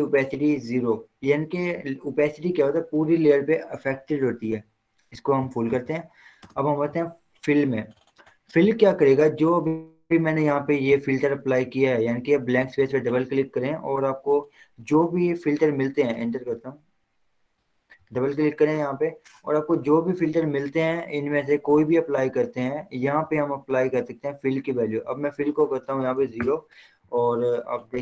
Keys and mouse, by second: 5.9 click, 6.6 Return, 8.3 click, 12.7 click, 16.6 Return, 17.8 click, 23.4 click, 23.6 click, 26.4 0, 26.6 Return.